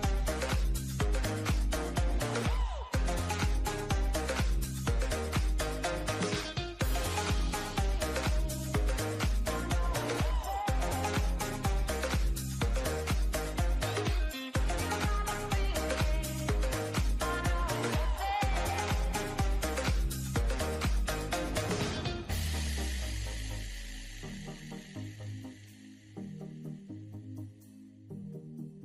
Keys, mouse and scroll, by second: 1.3-2.6 drag, 3.0 click, 5.2 click, 5.9 Tab, 7.9-10.6 drag, 11.8-14.5 drag, 15.7-19.3 drag, 20.8 drag, 22.5-24.5 drag, 25.1-26.2 shift+middle drag, 26.2-27.1 scroll up 1, 27.1-27.6 drag, 27.6-28.8 shift+middle drag.